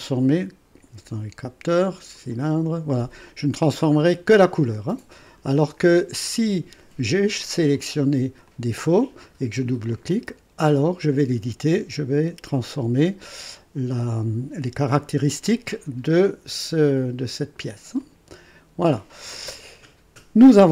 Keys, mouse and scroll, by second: 2.1 click, 5.2 click, 7.7 click, 8.5 click, 9.9 click, 18.0 click.